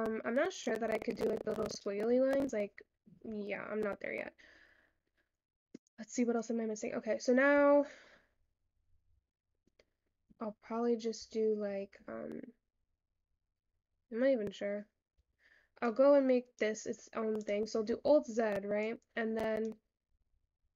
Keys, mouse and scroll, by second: 0.1 scroll up 6, 0.2-2.1 shift+middle drag, 2.1-2.6 scroll up 5, 2.6-3.5 scroll down 5, 3.5 shift+middle click, 4.2-4.7 shift+scroll up 6, 4.7-5.1 scroll down 6, 5.5 scroll up 3, 6.4-7.6 scroll down 5, 7.6 Tab, 8.0 scroll down 8, 8.3-9.0 scroll up 8, 9.3 Tab, 9.9 scroll up 4, 11.6 scroll down 1, 11.7 Tab, 12.3 scroll down 2, 13.2 scroll down 4, 14.4-14.8 scroll down 3, 14.8-15.2 scroll up 6, 15.3 Tab, 15.9 click, 17.4 click, 18.1 alt+z, 18.9 click, 20.0-20.6 scroll up 7, 20.6-20.7 scroll down 5.